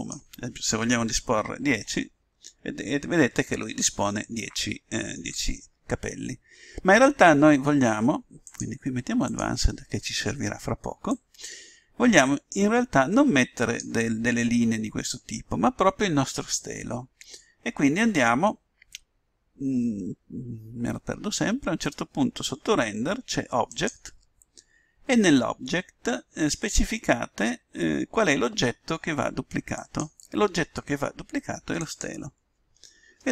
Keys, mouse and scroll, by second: 9.2-11.0 drag, 11.1-12.8 drag, 23.7-25.4 drag, 29.7-31.4 drag.